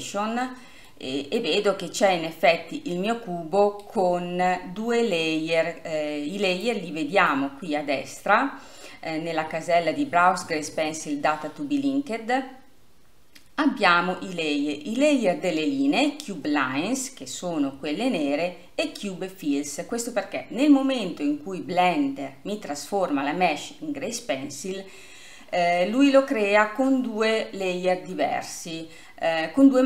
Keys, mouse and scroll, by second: 0.4 scroll down 2, 1.0-6.9 middle drag, 6.9-17.8 drag, 17.8-18.8 scroll up 2, 18.8 scroll up 1, 19.7-20.7 scroll up 1, 20.7 scroll up 1.